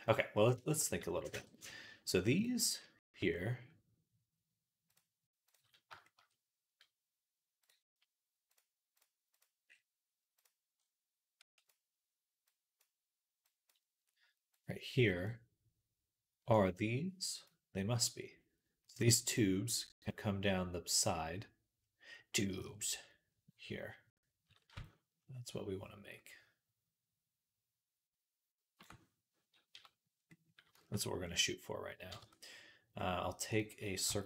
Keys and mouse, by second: 0.0 right click, 0.5 shift+click, 0.6-11.5 right drag, 2.2-7.5 drag, 8.4-11.5 drag, 29.6 w, 32.1 Tab.